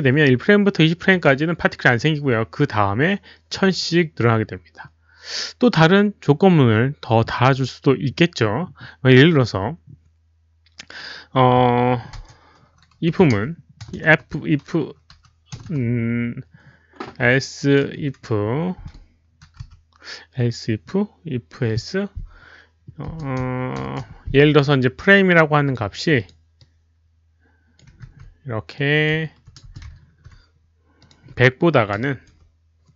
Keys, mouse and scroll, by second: 1.0-1.7 typing, 1.1 click, 3.5 click, 7.3 click, 12.8-13.8 typing, 13.0 click, 15.2 i, 15.7 BackSpace, 17.8-18.5 typing, 19.6 f, 23.0 i, 23.0 BackSpace, 23.8 shift+8, 24.0 shift+8, 25.1-26.1 typing, 25.3 click, 26.1 Right, 26.1 Down, 26.1 click, 27.0 click, 27.6-28.4 typing, 28.7 click, 29.6-31.1 typing, 30.3 click, 31.0 click, 31.1 ctrl+v, 31.1 ctrl+c, 31.9 Delete, 32.2 Right.